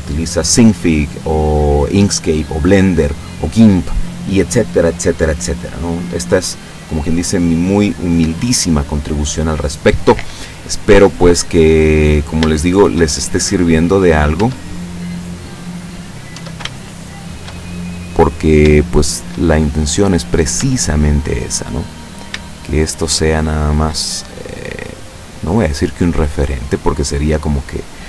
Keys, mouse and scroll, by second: 10.8-12.0 middle drag, 12.0-12.5 scroll up 2, 12.5-13.1 shift+middle drag, 13.2-14.3 shift+middle drag, 14.5 Tab, 14.9-16.1 middle drag, 16.4 Tab, 16.8-17.6 shift+middle drag, 18.0-18.7 middle drag, 18.8-19.5 shift+middle drag, 19.6-20.5 shift+middle drag, 20.7 Tab, 22.1 shift+right click, 22.6 shift+right click, 23.5 shift+right click, 24.5-25.9 drag, 26.3 right click, 26.8-28.0 drag.